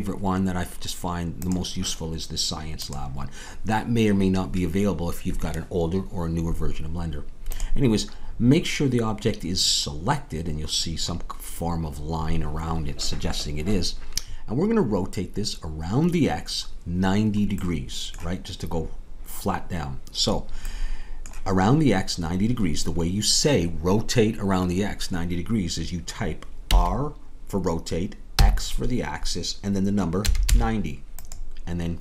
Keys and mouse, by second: 26.6 r.